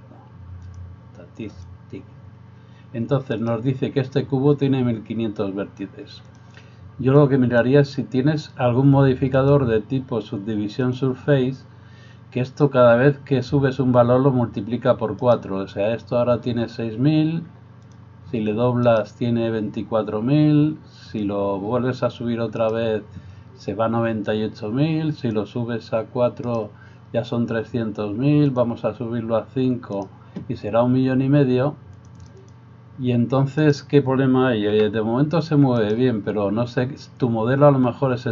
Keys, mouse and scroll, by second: 3.4 right click, 7.2-38.3 drag, 15.2 right click, 18.9 right click, 22.7 right click, 33.6 right click, 34.8 g.